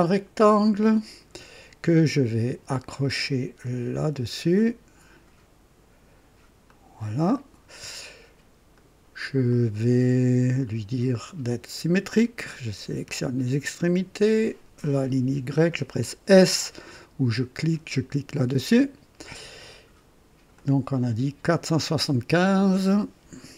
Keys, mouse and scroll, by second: 0.6 click, 4.0 click, 6.6 click, 7.3 right click, 8.7 right click, 9.5 click, 11.1 click, 13.0 click, 14.8 click, 18.4 s, 20.5 click, 22.5 click.